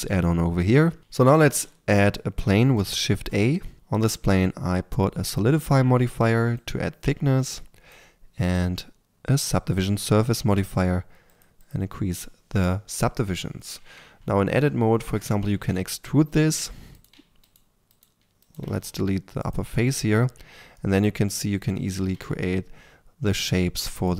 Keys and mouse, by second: 1.0-2.8 drag, 1.0 a, 2.8 shift+a, 3.7-6.5 drag, 8.3-11.2 drag, 12.6-13.2 drag, 13.8 Tab, 15.5 e, 16.9-18.6 right drag, 18.6 x, 20.4 a, 21.8 s.